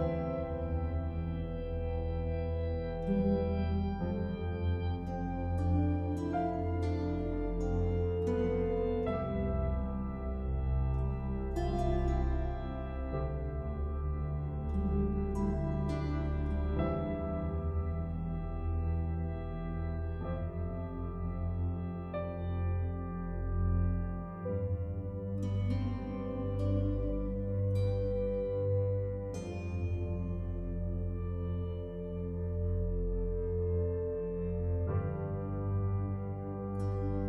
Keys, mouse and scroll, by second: 2.5 typing, 4.0 typing, 5.3 typing, 10.1 click, 18.7 click, 28.6 right click, 31.3 click, 34.0 scroll up 1, 34.7-35.1 scroll down 1, 35.9 click.